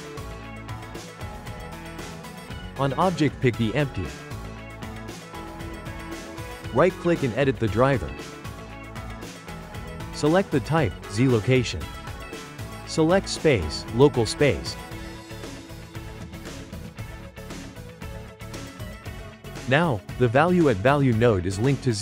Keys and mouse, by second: 0.9 click, 1.1 right click, 6.3-9.5 right drag, 17.9 click, 20.4-22.0 ctrl+middle drag.